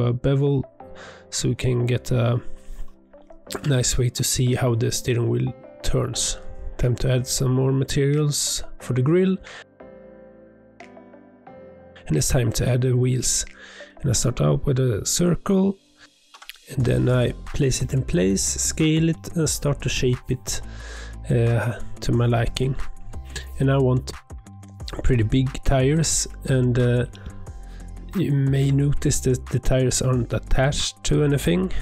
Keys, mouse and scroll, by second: 1.1-2.3 drag, 3.0 click, 3.8 scroll up 1, 4.1 click, 4.4 Tab, 4.5 scroll down 2, 4.6 middle click, 5.0 scroll up 1, 5.1 click, 5.3 g, 5.8 click, 5.9 click, 6.2 ctrl+a, 6.5 click, 6.6 scroll up 1, 6.9 scroll down 1, 7.1-7.5 shift+middle drag, 7.5 click, 7.7 Tab, 8.1 alt+click, 8.2 middle click, 8.5 c, 9.8 3, 10.1 c, 11.2-12.2 drag, 12.3 Tab, 12.4 scroll down 2, 12.4-13.0 middle drag, 13.0 scroll up 2, 13.8 shift+a, 15.2-16.2 drag, 16.5 r, 17.9 click, 18.2 g, 18.8 s, 20.4 middle click, 20.9 g, 23.0-24.0 middle drag, 24.6 shift+s, 25.5 Tab, 25.7 1, 26.8 click, 27.6 click, 28.2 e, 29.8-30.3 scroll up 1, 30.3 e, 31.4 g.